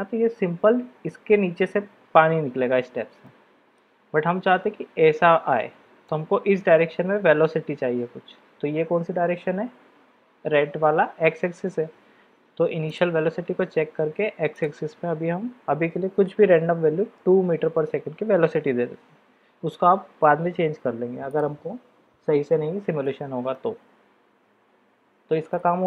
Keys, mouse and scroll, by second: 3.2-3.8 middle drag, 6.1-6.6 middle drag, 12.8 click, 14.5-19.2 drag, 21.3 click, 23.0-23.5 middle drag.